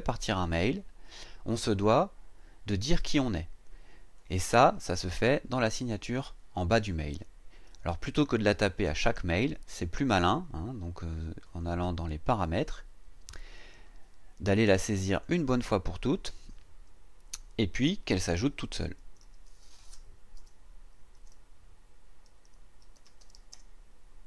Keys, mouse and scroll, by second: 4.2 click, 7.5-7.8 scroll down 2, 8.1-9.4 scroll down 3, 11.5 click, 15.1 click, 19.0 Caps_Lock, 20.4-24.2 typing.